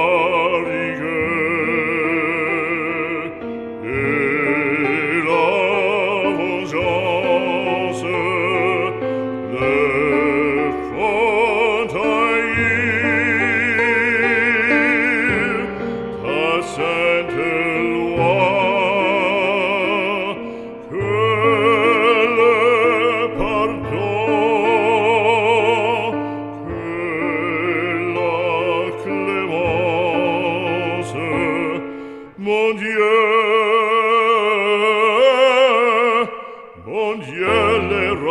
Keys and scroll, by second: 33.5 ctrl+v.